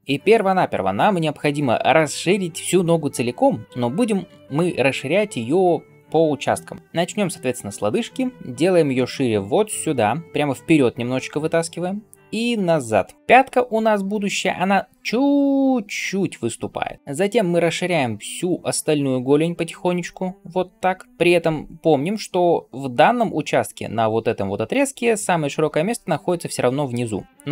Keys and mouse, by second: 8.4-27.5 drag.